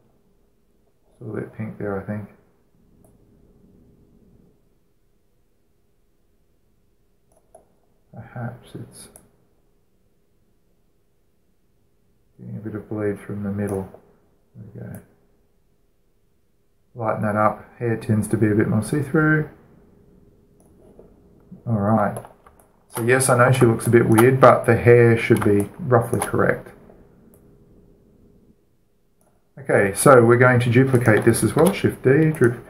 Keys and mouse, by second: 0.6-3.5 middle drag, 3.8 click, 8.1-11.8 drag, 14.4-17.4 drag, 21.4-23.2 drag, 23.4-28.2 alt+shift+middle drag, 28.2-29.9 drag, 31.5 click, 31.7 middle click, 31.8 click, 31.8 middle click, 32.0-32.6 shift+right drag, 32.4 shift+d.